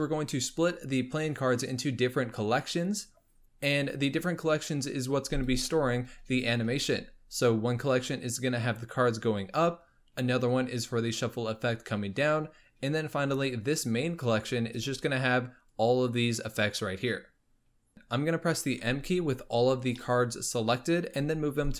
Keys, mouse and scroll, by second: 13.3-14.3 scroll up 1, 14.3-15.7 scroll up 1, 15.8-17.9 drag, 17.9-18.8 middle drag, 18.8 m, 20.0-20.8 middle drag, 20.8-21.2 scroll up 3, 21.2 m.